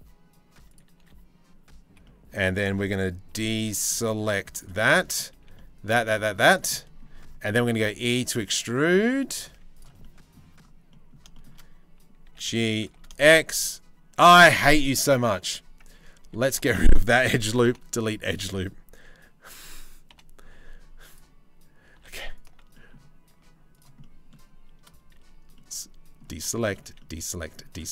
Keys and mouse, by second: 0.6 3, 1.6 click, 2.9 c, 4.4 middle click, 4.9 c, 6.3 middle click, 7.3 e, 9.1 z, 9.6 middle click, 10.5 middle click, 11.8 g, 14.4 ctrl+z, 15.8 2, 16.2 alt+click, 17.2 Delete, 19.7 Delete, 21.5 3, 22.0 alt+click, 22.3 click, 23.0 z, 23.6 click, 24.7 c, 26.1 shift+middle click, 27.8 z.